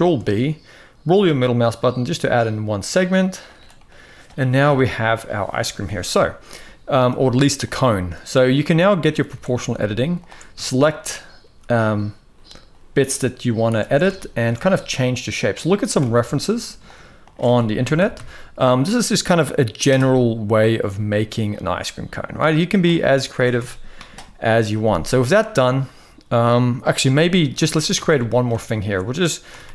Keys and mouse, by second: 3.5 middle click, 4.4 KP_1, 7.4 click, 9.0 alt+a, 9.9 alt+shift+drag, 10.3 shift+middle click, 11.1 s, 13.5 alt+a, 14.4 s, 15.7 alt+a, 16.6 alt+shift+click, 17.5 ctrl+KP_Add, 20.3 click, 21.2-22.5 drag, 23.2 Tab, 25.4-26.5 middle drag, 26.8 Tab, 27.0 middle click, 27.4 shift+middle click, 27.7 alt+a, 27.9 middle click, 29.2 g.